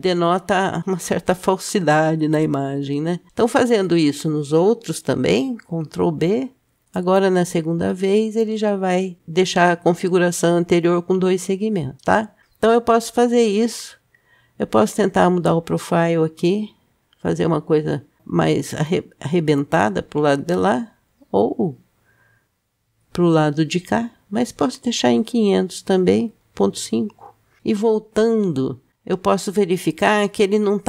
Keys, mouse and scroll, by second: 2.3 Tab, 3.3 click, 5.7 ctrl+b, 16.2-24.8 drag, 28.0 Tab.